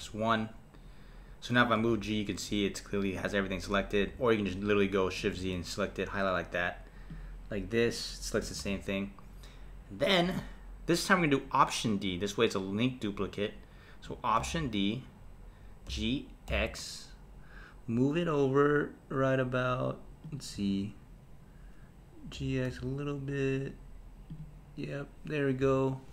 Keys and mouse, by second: 1.8 g, 5.3 shift+z, 7.1 click, 8.6 shift+z, 14.4 alt+d, 20.6 KP_1, 22.3 g, 25.6 KP_7.